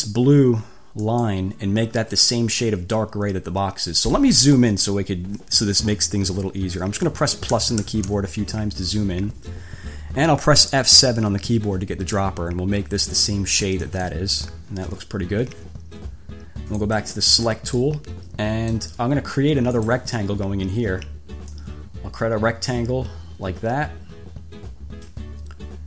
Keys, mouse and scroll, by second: 1.2 click, 7.7 =, 11.1 F7, 14.1 click, 17.0 click, 18.0-19.2 drag, 20.0 click, 21.7-25.8 drag.